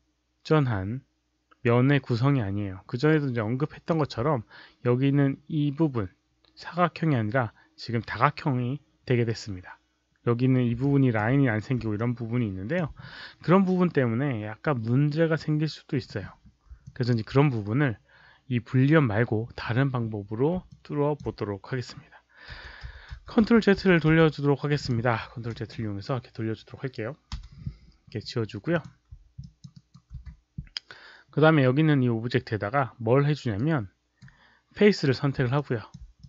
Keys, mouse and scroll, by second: 10.8-11.1 alt+drag, 11.9-12.7 alt+drag, 16.7 alt+click, 20.6 alt+click, 22.5-24.0 typing, 24.7 click, 27.3 Delete, 28.6 click, 29.3 alt+click, 29.6 alt+right click, 30.1 q, 33.5-34.1 right drag, 35.5-35.8 alt+drag, 36.1 click.